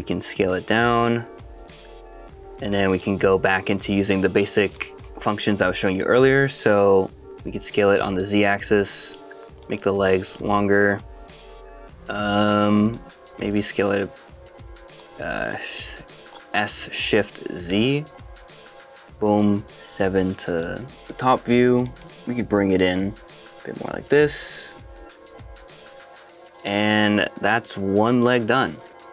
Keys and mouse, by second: 0.6 s, 1.7 click, 2.1 KP_1, 2.3 shift+middle click, 2.9 shift+middle click, 5.8 shift+middle click, 8.0 s, 8.2 z, 9.2 click, 9.6 shift+middle click, 11.6 click, 11.7 middle click, 12.9 middle click, 13.4 click, 16.6 s, 17.6 shift+z, 21.0 shift+KP_7, 21.1 shift+middle click, 21.8 shift+middle click, 23.0 g, 25.0 shift+click, 25.6 middle click, 26.2 shift+middle click, 26.4 middle click, 26.9-28.0 middle drag.